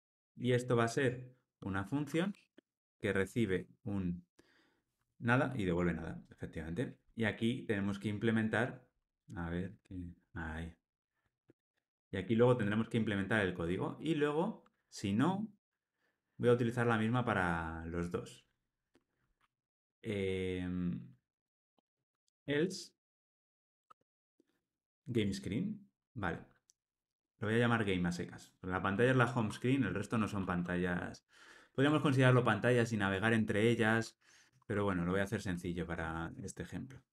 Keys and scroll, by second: 10.2 Tab, 25.1 Tab, 34.5 alt+Return.